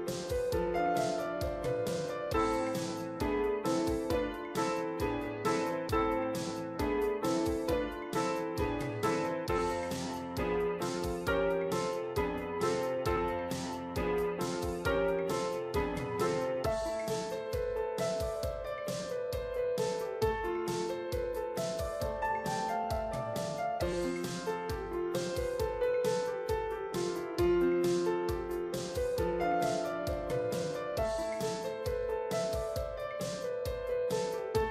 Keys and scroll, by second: 26.1 ctrl+t.